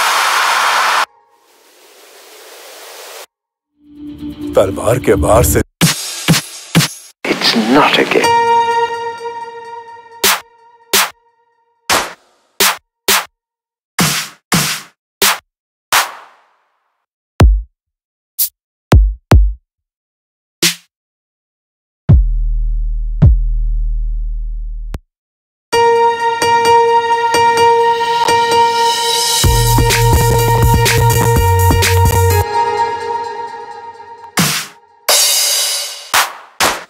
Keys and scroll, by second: 7.6 space, 25.3 space, 31.9 space.